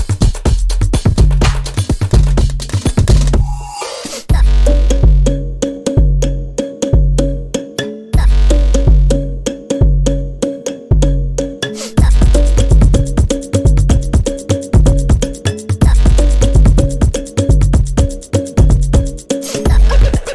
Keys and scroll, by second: 4.4 v, 6.4 space, 10.2 space, 16.3 space, 18.2 space.